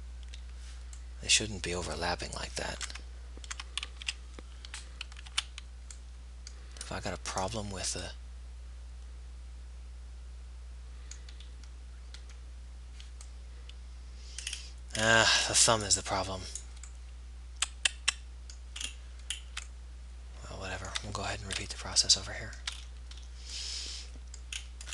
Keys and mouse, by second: 1.7-3.1 middle drag, 3.1 Tab, 3.7 Tab, 4.2 z, 5.6 a, 6.6 middle click, 8.5-9.5 middle drag, 9.7 middle click, 10.2 middle click, 11.2-12.7 middle drag, 14.6-18.5 middle drag, 21.7 middle click.